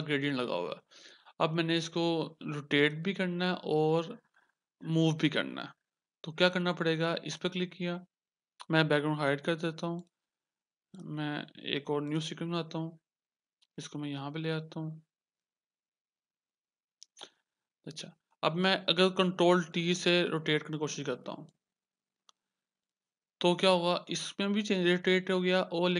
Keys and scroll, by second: 4.5 ctrl+d, 20.2 ctrl+t, 23.7 Return.